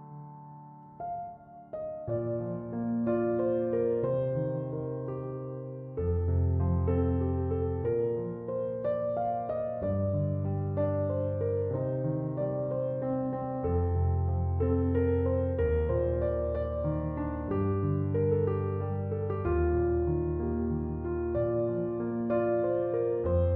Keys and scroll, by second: 0.0-1.4 typing, 1.5 Return, 4.7 0, 4.9 Return, 14.5 f.